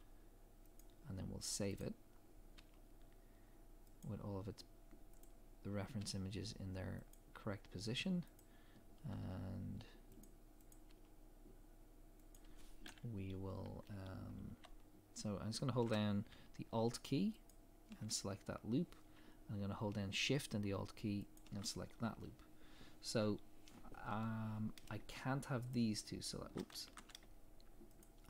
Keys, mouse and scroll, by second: 1.8 click, 2.6 g, 5.2 click, 6.0 g, 8.4 click, 9.1 g, 10.7 click, 10.9 g, 17.5 alt+click, 21.3 alt+shift+click, 25.7 click, 26.8 ctrl+z, 28.0 shift+click.